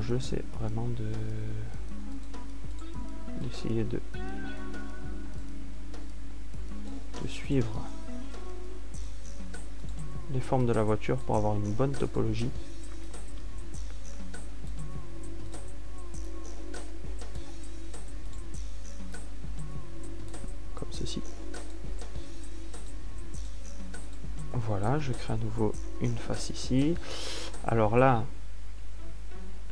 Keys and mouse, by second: 3.8 right click, 4.3-6.1 middle drag, 6.1-7.9 right drag, 7.9-9.0 drag, 9.0 right click, 10.0 click, 14.7 click, 16.2 click, 22.6 middle click, 26.6 f.